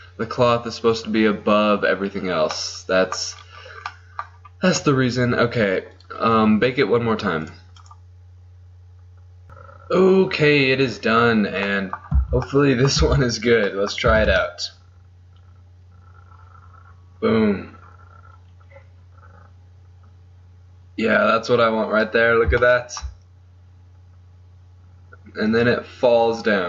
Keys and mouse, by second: 6.1-9.4 drag, 13.1 z, 14.3 alt+a, 18.1-19.7 middle drag, 21.9 middle click.